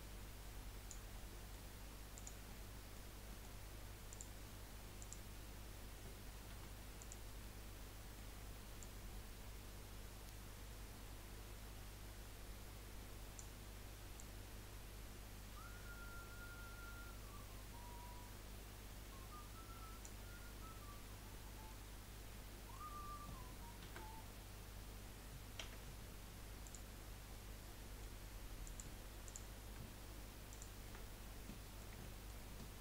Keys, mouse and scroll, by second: 1.1 scroll up 1, 1.2 middle click, 2.1 click, 2.5-4.1 middle drag, 4.1 click, 5.0 click, 7.0 click, 7.4-8.8 middle drag, 8.8 click, 14.1 click, 20.6-23.8 middle drag, 23.8 a, 25.6 u, 27.4-28.6 middle drag, 28.6 click, 29.2 click, 30.5 shift+click, 31.4-32.8 middle drag.